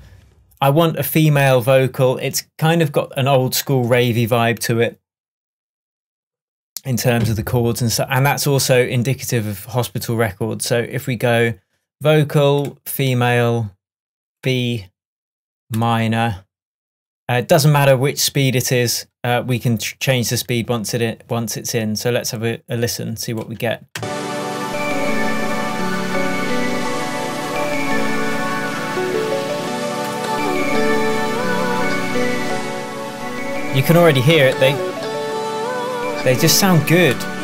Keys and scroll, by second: 24.0 space.